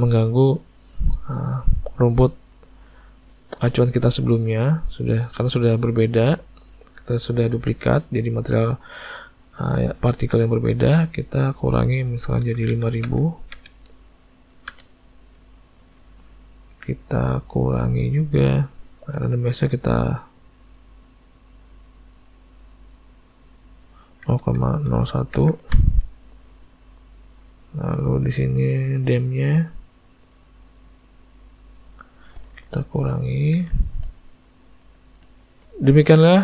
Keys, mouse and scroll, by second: 0.7 middle click, 1.2 middle click, 2.0 middle click, 10.9 click, 13.0 KP_0, 15.3 middle click, 17.0 click, 20.3 click, 23.7 click, 27.5 click, 29.5 click, 33.5 alt+a, 33.8 shift+middle click, 34.1 middle click, 34.6 middle click, 35.0 shift+middle click.